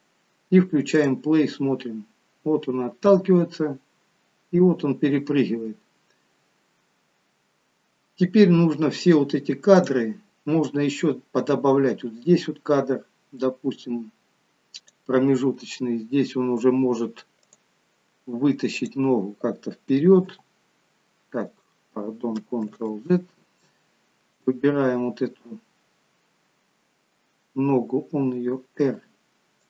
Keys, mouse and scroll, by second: 1.0 click, 9.9 click, 10.7 click, 17.6 click, 20.4 g, 23.1 ctrl+z, 24.3 click.